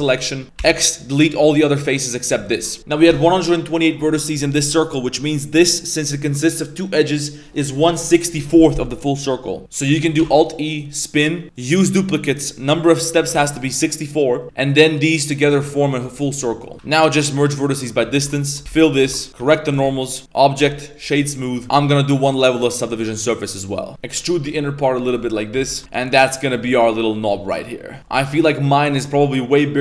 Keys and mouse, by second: 0.6 x, 2.0 a, 2.5 shift+middle click, 10.2 alt+e, 11.5-13.6 drag, 16.1-16.4 middle drag, 16.7 middle click, 16.7 KP_5, 16.7 a, 17.0 m, 17.9 middle click, 18.1 1, 18.6 f, 19.0 Tab, 19.1 middle click, 19.3 Tab, 19.3 ctrl+s, 19.3 a, 19.4 shift+n, 19.8 Tab, 20.2-21.0 drag, 21.4 middle click, 23.9 e, 24.4 s, 25.5 2, 25.8 Tab, 25.8 a, 25.9-26.5 middle drag, 26.7-27.0 middle drag, 27.2 click, 27.4-28.0 middle drag, 28.0 KP_1, 28.3-29.1 middle drag.